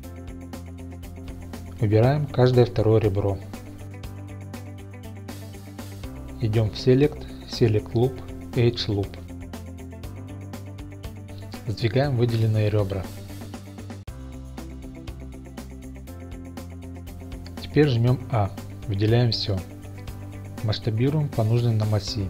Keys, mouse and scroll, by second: 0.8 click, 1.4 2, 1.9 click, 2.9 shift+click, 3.5 shift+click, 4.1 shift+click, 4.5 shift+click, 5.5 shift+click, 6.8-10.6 drag, 13.1 g, 13.6 x, 16.9 click, 18.6 a, 20.7 s, 21.6 y.